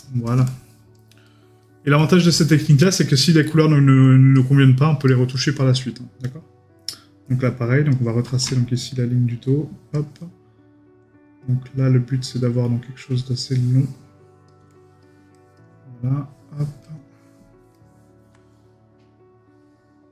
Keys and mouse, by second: 1.3 right click, 2.0 middle click, 3.4 middle click, 5.1 right click, 17.7 middle click.